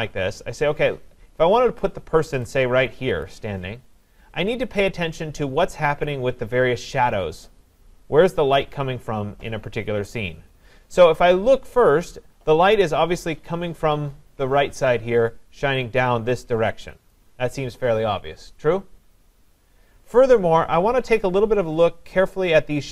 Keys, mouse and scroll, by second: 3.3 click, 17.1 click.